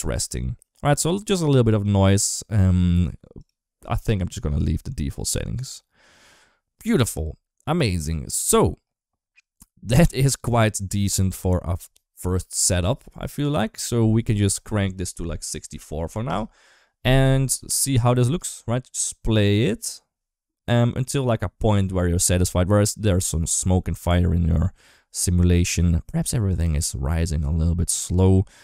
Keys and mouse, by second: 1.6 click, 14.7 click, 15.4 click, 17.3-17.9 drag, 18.2 space.